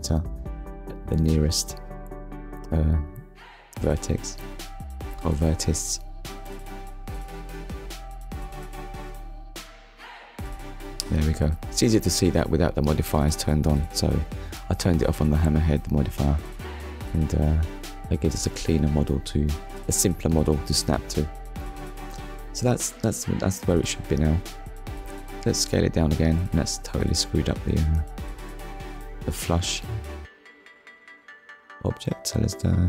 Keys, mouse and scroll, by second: 1.4 Tab, 2.6 click, 3.4 click, 4.9 click, 5.9 click, 6.7 Tab, 7.9 click, 9.1 click, 9.9 click, 13.6 middle click, 15.3 scroll down 1, 16.8 click, 17.3 middle click, 19.0 middle click, 20.1 middle click, 22.0 KP_1, 23.4 click, 27.0 right click, 29.7-30.1 scroll up 1.